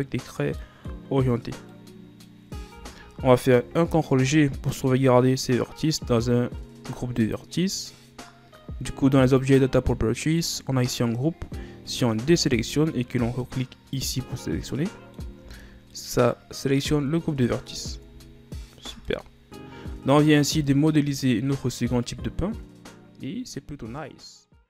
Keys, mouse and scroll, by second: 0.8-2.6 middle drag, 2.6 scroll up 1, 2.8 Tab, 4.3 ctrl+g, 9.5 click, 12.4 a, 14.1 click, 14.9 middle click, 15.5 Tab, 16.1-17.1 middle drag, 17.1 Tab, 17.3 scroll down 2, 18.1 Tab, 18.4 scroll down 3, 19.0 a, 19.3-21.6 middle drag, 21.6 scroll up 3.